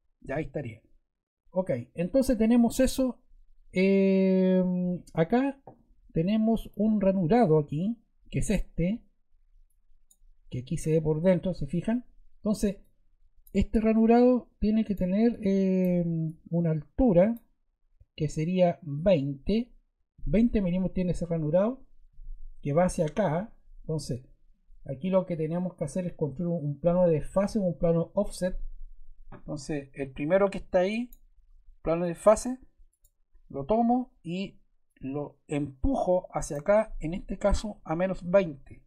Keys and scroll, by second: 37.3-38.6 typing.